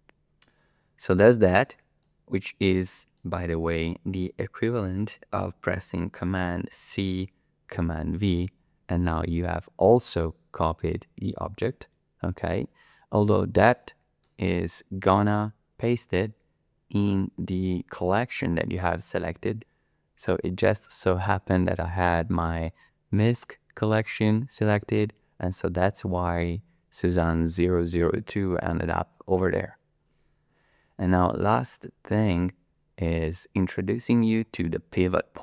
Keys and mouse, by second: 1.1 click, 2.0-2.6 middle drag, 2.6 click, 6.7 ctrl+c, 7.7 ctrl+v, 14.2 click, 14.3 middle click, 14.4 click, 30.5 click, 30.5 middle click, 30.6 middle click, 30.7 click, 31.2 middle click.